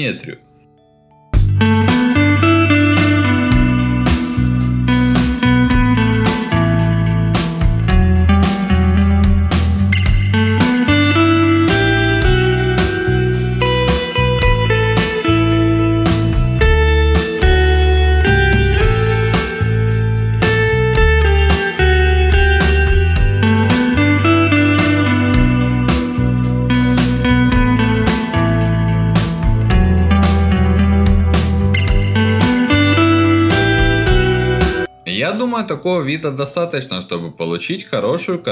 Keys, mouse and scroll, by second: 0.2 middle click, 0.3 alt+middle click, 0.5 ctrl+alt+middle click, 0.7 alt+middle click, 0.9 ctrl+alt+middle click, 1.5 alt+click, 2.2 ctrl+alt+middle click, 2.4 alt+middle click, 2.7 middle click, 2.8 alt+middle click, 3.0 ctrl+alt+middle click, 3.1 alt+middle click, 3.5 alt+click, 4.3 alt+middle click, 4.5 middle click, 4.7 alt+middle click, 5.0 ctrl+alt+middle click, 5.2-6.8 alt+middle drag, 6.9 alt+middle click, 7.7 right click, 8.4 click, 8.7 middle click, 9.5-11.1 drag, 11.2-13.3 alt+middle drag, 13.9 click, 14.3 click, 14.7 click, 15.1 click, 15.2 ctrl+alt+middle click, 15.4 alt+middle click, 15.9 click, 16.1 ctrl+z, 16.1 ctrl+alt+middle click, 16.4 ctrl+z, 16.7 ctrl+shift+click, 17.7 alt+middle click, 18.1 click, 18.3 alt+middle click, 18.7 alt+middle click, 19.0 click, 19.1 alt+middle click, 19.4 click, 19.6 click, 19.8 alt+middle click, 20.4 click, 20.9 alt+middle click, 21.6 ctrl+alt+middle click, 21.6 alt+middle click, 21.8 ctrl+alt+middle click, 23.6 click, 23.9 click, 24.0 alt+middle click, 24.2 alt+middle click, 24.5 click, 24.5 alt+middle click, 25.2 click, 25.2 alt+middle click, 25.5 alt+middle click, 26.1 click, 26.2 alt+middle click, 26.5 click, 26.8 alt+middle click, 27.1 click, 27.3 click, 27.4 click, 27.6 click, 27.8 ctrl+alt+middle click, 27.9 alt+middle click, 28.4 click, 28.5 alt+middle click, 28.8 alt+middle click, 29.3 alt+middle click, 29.6 click, 29.6 ctrl+alt+middle click, 30.0 click, 30.0 alt+middle click, 30.4 click, 30.6 click, 31.0 alt+middle click, 31.4 alt+middle click, 31.6 click, 32.0 alt+middle click, 32.2 middle click, 32.6 alt+middle click, 33.0 alt+middle click, 33.1 click, 33.3 alt+middle click, 33.7 ctrl+alt+middle click, 34.0 click, 34.3 click, 34.5-38.5 alt+middle drag.